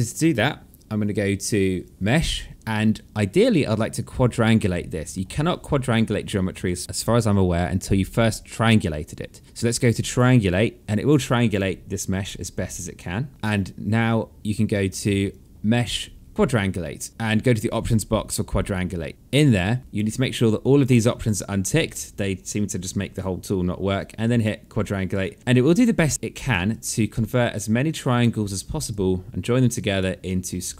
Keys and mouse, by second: 1.4 click, 14.8 click, 19.5 click, 20.8 click, 23.9 click, 25.8 right click, 26.2 click, 26.7 alt+middle click, 27.1 right click, 28.4 click, 29.3 alt+click, 29.8 alt+middle click, 30.3 alt+click.